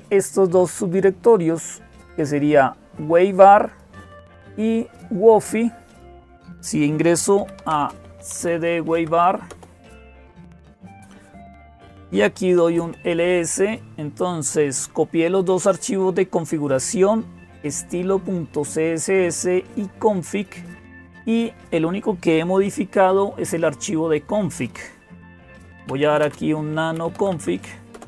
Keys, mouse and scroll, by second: 0.0-28.0 typing, 1.8-5.8 drag, 9.3 Return, 15.8-17.5 drag, 19.5-21.9 drag, 27.7 Return.